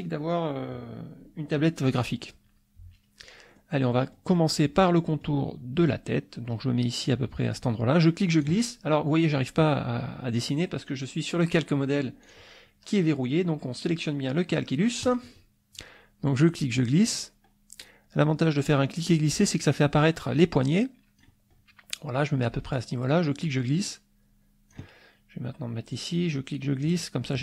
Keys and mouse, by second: 3.5 click, 3.8 click, 4.7 click, 7.6-8.6 drag, 12.2 click, 15.0 click, 16.5-21.4 drag, 23.2-24.9 drag, 25.9-27.0 drag.